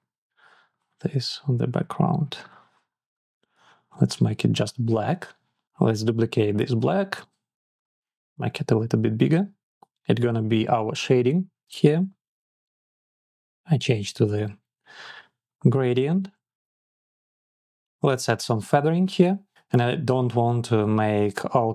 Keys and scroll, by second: 2.8 Up, 3.8 Up, 4.4 Down, 4.9 Up, 5.2 Down, 5.6 Up, 8.1 Up, 8.7 Up, 9.1 Down, 9.3 Up.